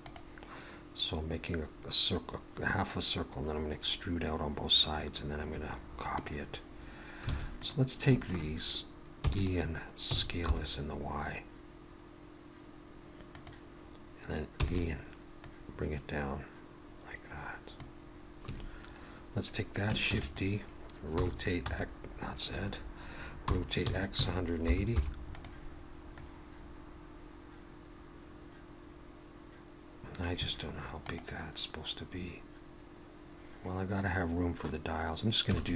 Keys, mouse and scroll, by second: 7.3 alt+a, 7.6 click, 8.2 shift+click, 9.2 e, 10.1 s, 14.6 e, 15.4 click, 19.9 shift+a, 20.1 shift+d, 21.2 r, 23.5 r, 26.2 click.